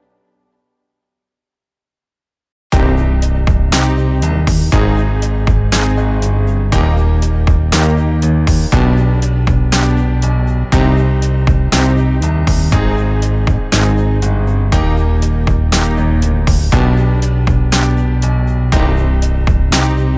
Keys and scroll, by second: 2.2 ctrl+z, 11.0 ], 11.4 ctrl+z, 14.4 [, 14.9 ctrl+z, 16.0 ctrl+z, 16.7 [, 16.7 [, 17.2 [, 17.5 ctrl+z, 18.7 ], 19.2 ], 19.7 ctrl+z.